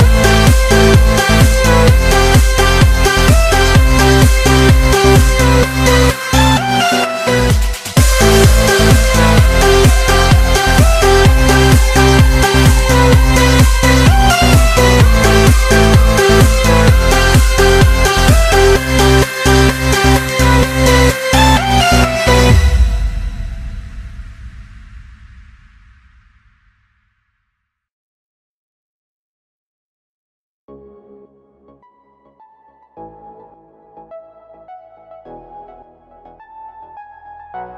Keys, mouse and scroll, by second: 0.3 Tab, 0.7 Tab, 1.1 click, 2.1 z, 2.8 click, 3.3-4.2 scroll down 2, 4.6 shift+a, 6.2 click, 6.6-9.2 middle drag, 9.2 KP_7, 10.1 shift+a, 15.3-16.6 scroll down 6, 16.6-18.3 drag, 18.3-19.7 scroll up 10, 19.7 s, 22.0 KP_1, 22.6-23.1 scroll up 4, 23.1 s, 26.0-31.6 drag, 32.1 KP_7, 33.4 s.